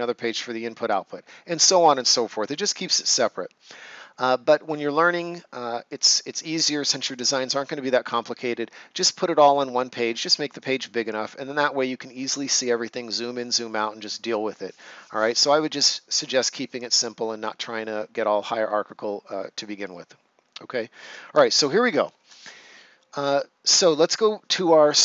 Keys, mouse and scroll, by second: 1.9 right click.